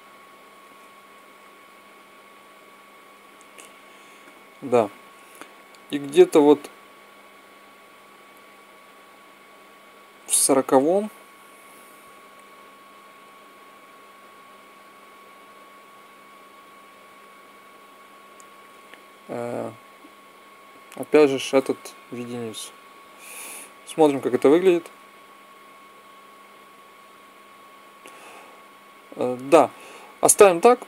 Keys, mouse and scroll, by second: 1.2 alt+a, 4.1 Escape, 5.4-7.3 drag, 12.3 click, 14.5-16.6 middle drag, 19.9-21.6 drag, 22.0 i, 22.5 i, 23.8 click, 24.5 alt+a, 25.6 middle click, 29.2 Escape, 30.7 click.